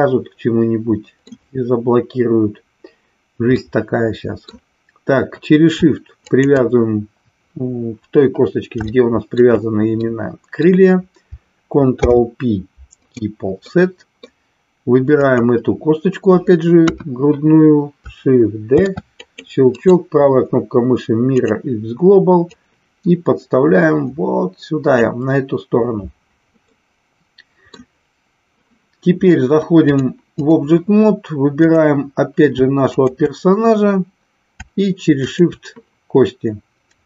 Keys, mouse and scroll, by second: 3.5-4.5 middle drag, 6.1 shift+click, 8.9 shift+middle click, 10.0 middle click, 11.9 ctrl+p, 13.6 middle click, 15.1 click, 16.8 KP_1, 18.8 shift+d, 19.8-21.5 right drag, 22.5-24.9 drag, 26.8-27.8 middle drag, 29.9 click, 31.6 drag, 33.0 shift+click, 35.3 shift+click.